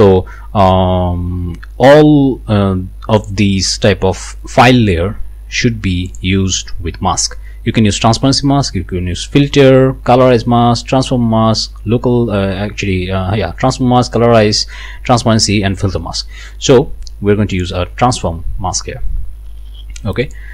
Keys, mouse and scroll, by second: 3.2 click, 6.1 click, 17.5 click, 20.2 click.